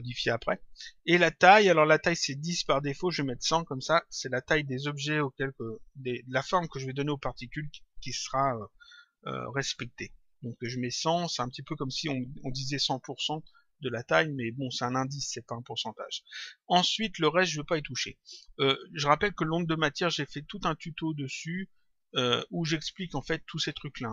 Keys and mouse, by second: 1.7 click, 11.2 click, 15.7 click, 22.1 click.